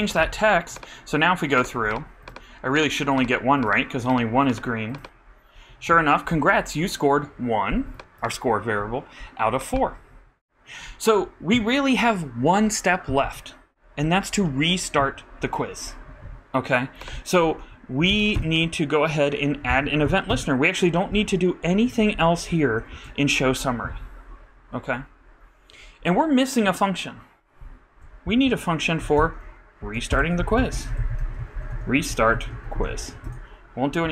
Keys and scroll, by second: 14.5 shift+-, 18.0 super+Up, 18.1 super+Right, 18.3 super+Return, 19.7 shift+super+Left, 20.0 shift+super+BackSpace, 21.2 super+0, 21.9 super+BackSpace, 22.7 super+;, 22.9 super+Left, 31.6-33.5 typing.